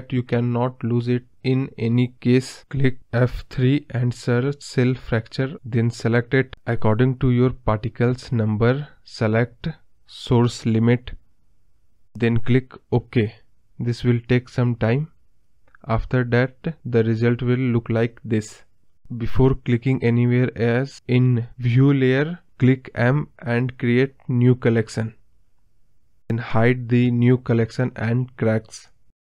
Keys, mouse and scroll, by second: 0.0 click, 9.2 KP_0, 16.0-16.7 scroll up 4, 16.7 scroll down 2, 27.7 scroll up 1, 27.8 scroll down 2, 28.0-29.2 middle drag.